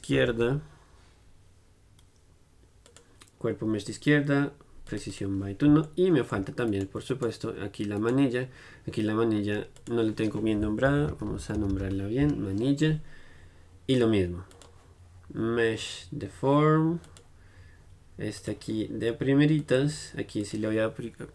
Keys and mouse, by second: 6.1-7.3 middle drag, 6.8 click, 6.8-9.9 right drag, 9.9-16.6 drag, 14.0 l, 18.5-21.3 drag.